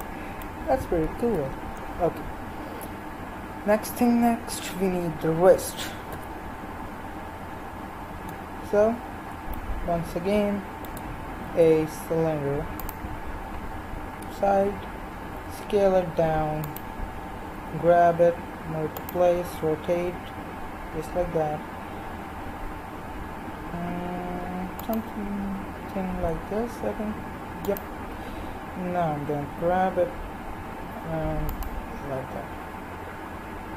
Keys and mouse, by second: 1.2 KP_1, 4.6 KP_3, 6.1 z, 11.4 shift+a, 14.1 KP_3, 15.4 s, 17.6 g, 19.5 r, 25.5 g, 29.2 g.